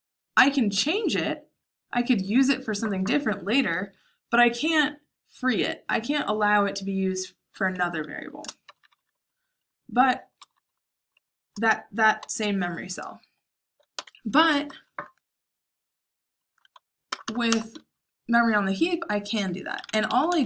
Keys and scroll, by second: 8.6-9.2 typing, 10.3 shift+[, 10.5 shift+[, 12.0 j, 13.9 shift+o, 17.0 BackSpace, 17.2 BackSpace, 17.4 BackSpace, 19.5-20.4 typing.